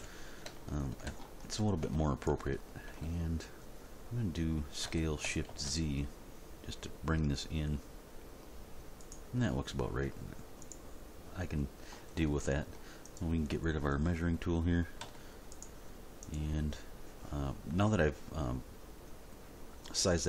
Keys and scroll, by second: 0.0 End, 4.8 s, 5.5 shift+z, 15.0 x.